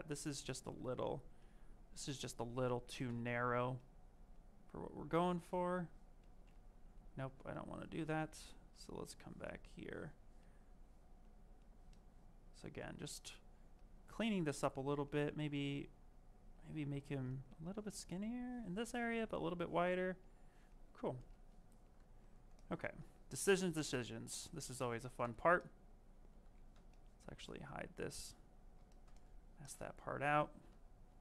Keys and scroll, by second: 2.0 ctrl+z, 6.9 s, 23.8 ctrl+shift+space, 26.3 ctrl+z.